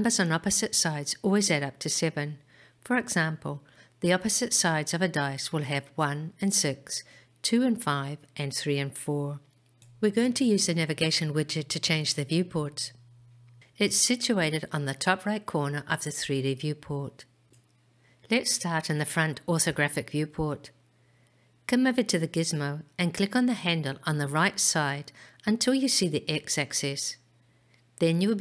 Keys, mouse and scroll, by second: 24.6 click, 25.7 click, 27.0 click.